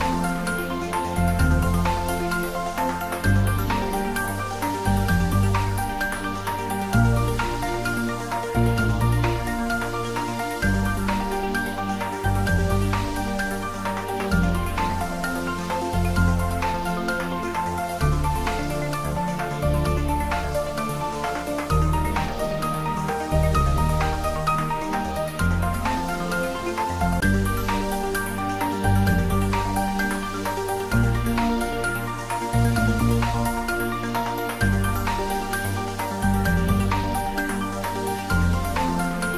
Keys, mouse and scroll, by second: 0.8-1.9 scroll down 1, 2.3 alt+h, 3.1-3.8 scroll down 1, 4.7 click, 6.3-6.8 scroll down 1, 7.3-9.3 middle drag, 9.3-10.0 scroll up 1, 10.3 middle click, 11.4-13.6 scroll up 1, 13.6-16.8 middle drag, 20.1-21.5 scroll up 1, 21.5-24.7 middle drag, 24.7-25.1 scroll up 1, 31.4-34.6 drag, 35.4-39.3 drag.